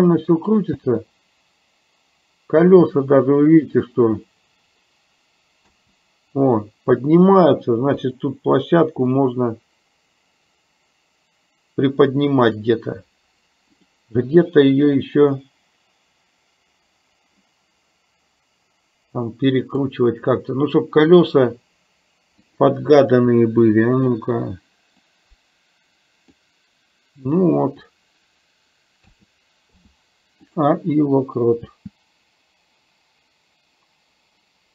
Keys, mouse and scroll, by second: 0.8 space, 9.4-12.6 drag, 13.8 click, 15.3-20.0 drag, 25.3-26.5 drag, 29.1 a, 29.9 i, 31.8 space.